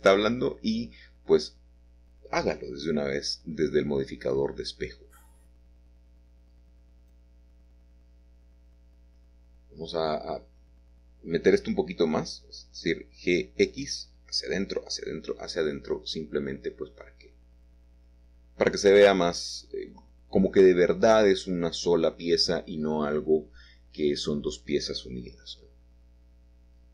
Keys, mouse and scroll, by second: 0.6 shift+click, 1.4 shift+click, 2.0 click, 2.3 shift+click, 5.6 click, 7.6 a, 8.9 shift+click, 10.1 shift+click, 10.6 typing, 11.4 shift+click, 11.9 shift+click, 12.3 shift+click, 13.4-14.3 typing, 16.4 click, 17.2 click, 18.1 click, 21.4 shift+click, 22.0 click, 23.1 click, 26.2 shift+click, 26.6-26.9 scroll down 1.